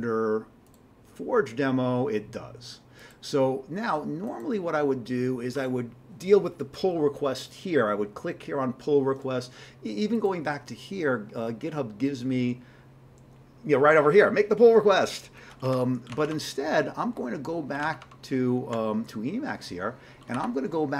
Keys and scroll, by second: 15.7 alt+Tab, 16.1 alt+Tab, 16.3 alt+Tab, 17.8 alt+Tab, 20.3 Down.